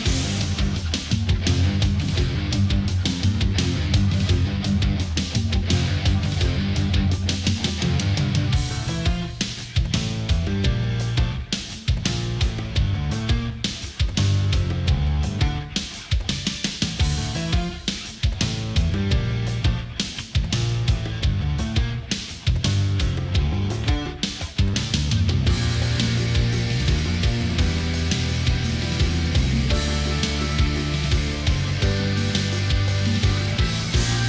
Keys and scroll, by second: 9.3 ctrl+z, 15.2 Right, 15.4 Up, 15.5 Right, 15.6 Down, 17.0 ctrl+z, 24.1 ctrl+z, 25.8 ctrl+0, 26.3 ctrl+=, 27.8 ctrl+=, 28.0 space, 29.5 space, 32.7 space, 33.5 ctrl+z.